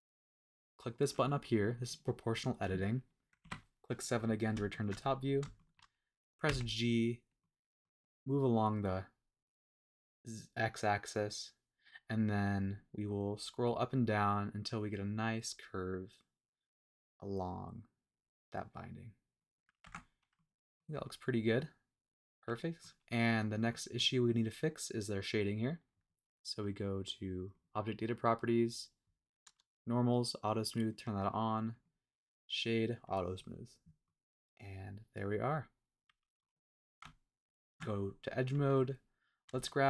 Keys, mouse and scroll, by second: 1.8 click, 3.4 KP_7, 4.2 scroll up 2, 4.7 shift+middle click, 5.1-5.4 scroll up 2, 5.5 shift+middle click, 6.4 g, 7.4 middle click, 11.6-12.3 scroll down 4, 12.3-13.4 scroll up 5, 13.6 scroll down 2, 13.9 scroll up 2, 14.2 scroll down 1, 14.3 scroll up 1, 14.6-15.4 scroll down 3, 15.4-15.8 scroll up 2, 15.8 scroll down 1, 16.7-17.2 scroll down 1, 18.2-18.6 scroll up 1, 19.4 click, 19.8 Tab, 20.1 scroll down 1, 20.3-20.8 middle drag, 21.0-21.4 scroll down 2, 21.5-23.0 middle drag, 23.0 scroll up 2, 23.3 scroll down 3, 23.6 scroll up 1, 23.7-24.0 middle drag, 27.5 click, 28.6-30.5 scroll down 2, 30.5 click, 30.9 click, 31.7-34.0 drag, 31.7 right click, 34.0-36.4 middle drag, 36.6 scroll up 1, 37.0 Tab, 38.3 click, 38.8 middle click, 39.6 shift+middle click.